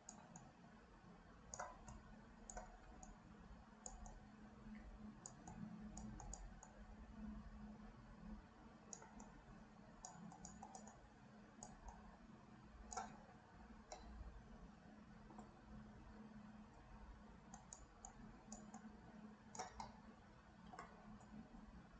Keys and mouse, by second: 0.4-1.6 drag, 1.9 shift+click, 3.2 click, 4.1-5.3 drag, 5.6 click, 6.4 click, 6.7-9.1 drag, 9.3 click, 10.4 shift+click, 10.8 shift+click, 11.0 shift+click, 11.9-13.1 shift+drag, 14.0-15.4 middle drag, 17.7 shift+click, 18.2 shift+click, 18.8 shift+click, 19.9 middle click.